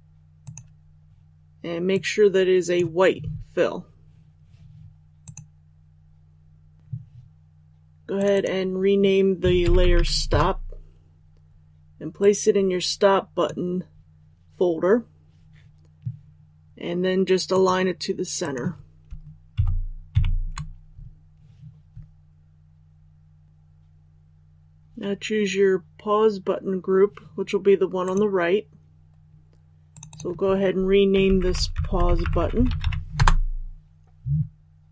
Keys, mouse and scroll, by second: 10.3 Return, 12.2-14.1 drag, 19.5 shift+Up, 20.1 shift+Up, 23.4 click, 32.1 space, 33.1 Return.